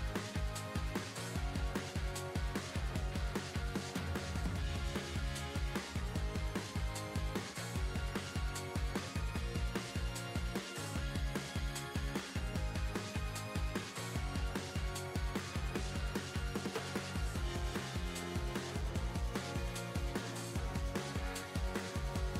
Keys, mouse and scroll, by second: 0.0 scroll down 5, 0.0 s, 1.7 click, 2.3 shift+middle click, 3.0-3.8 scroll down 2, 3.8-4.1 scroll down 1, 4.2 shift+middle click, 5.6 scroll down 1, 5.8 shift+middle click, 6.5 scroll up 2, 8.8-9.7 scroll down 2, 9.8 shift+middle click, 11.4 shift+middle click, 16.3 shift+middle click, 17.0 shift+middle click.